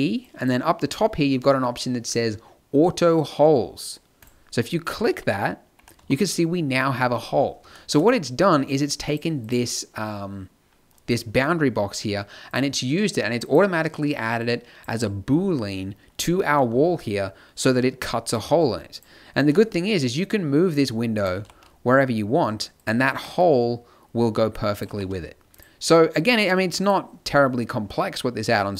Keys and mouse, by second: 0.2-2.1 drag, 4.2 click, 4.9 z, 5.7 t, 5.9 a, 7.1 middle click, 9.0-17.8 drag, 18.9 click, 19.4 g, 21.3 g, 23.1 g, 24.8 g, 26.8-28.7 drag.